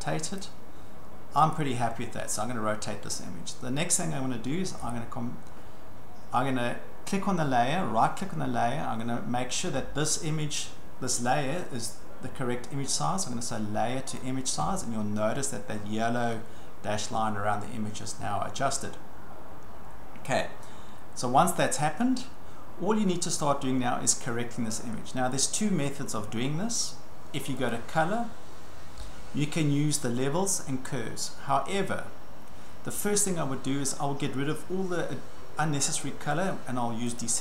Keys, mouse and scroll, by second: 0.4 click, 1.5 click, 4.9 right click, 8.5-10.0 right drag, 14.2 click, 17.2-17.6 ctrl+scroll, 19.2-20.2 ctrl+scroll, 23.5 ctrl+scroll, 25.3-25.9 scroll, 27.7 click, 29.2-29.5 scroll, 37.2 click.